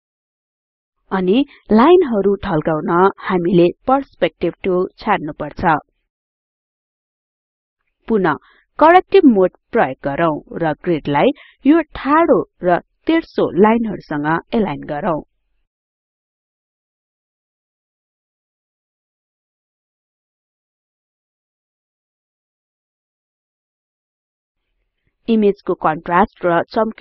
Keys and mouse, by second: 6.0 click, 11.5 click, 14.5 click, 17.0 click.